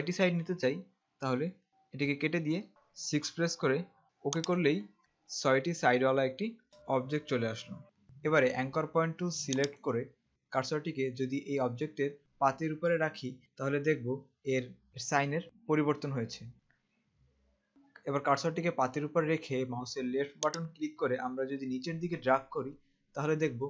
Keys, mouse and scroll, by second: 2.1 BackSpace, 3.0 6, 4.4 click, 6.7 click, 7.8 click, 9.8 click, 20.6 click.